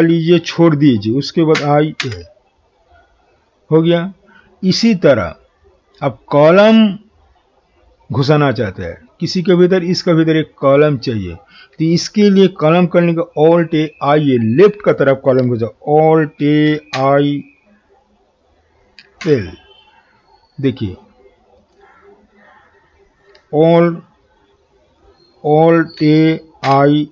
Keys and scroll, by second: 0.3 alt+a, 16.4 alt+a, 16.9 typing, 26.0 alt+a, 26.6 alt+i.